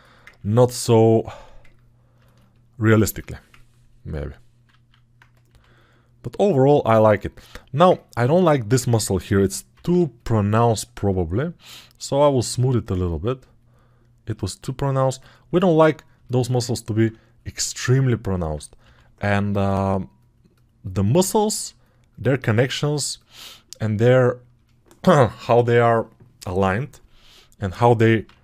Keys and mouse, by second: 1.5 1, 3.0 alt+shift+click, 3.0 alt+shift+middle click, 3.0 alt+shift+right click.